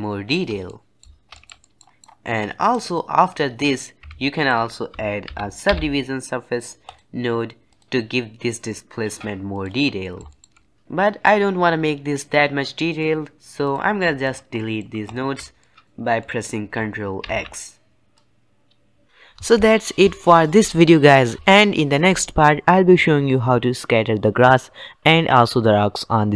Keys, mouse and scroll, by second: 0.6-1.2 middle drag, 1.2 shift+scroll up 1, 1.2-2.3 middle drag, 2.3-4.0 drag, 4.0 shift+a, 8.5 click, 9.9-12.8 shift+middle drag, 12.9-13.5 middle drag, 13.5 click, 14.1 shift+click, 14.5 shift+middle click, 15.0 shift+click, 15.5 middle click, 16.4-17.2 scroll down 1, 17.2 ctrl+x, 18.1 click, 19.1-26.3 middle drag.